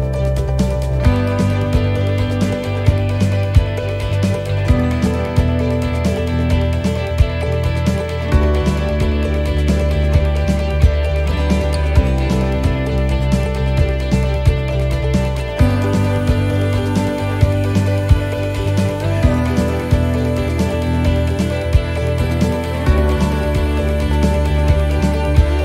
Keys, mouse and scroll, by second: 5.9 click, 12.9 right click, 14.0 click, 18.5 shift+middle click, 19.7 right click, 20.8 click.